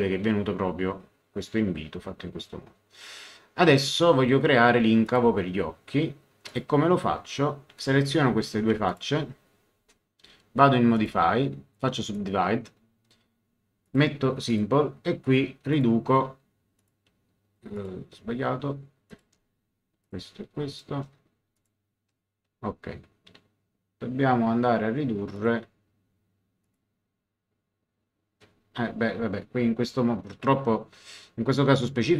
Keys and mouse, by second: 5.0 click, 6.5 click, 7.7 ctrl+click, 8.9 ctrl+click, 10.9 click, 12.0 click, 13.8 click, 15.7 click, 16.7 click, 19.1 click, 20.7 ctrl+click, 21.5 ctrl+click, 25.3 click, 26.6 click, 30.4 click.